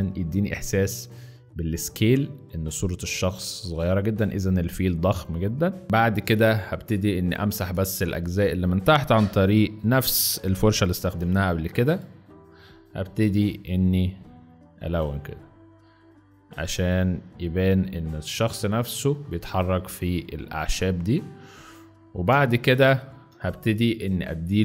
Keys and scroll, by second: 5.8 z, 6.2 space, 11.0 [, 12.4 ctrl+z, 13.2 ctrl+x, 18.3 z, 20.1 space, 20.8 z, 22.3 space, 22.9 z.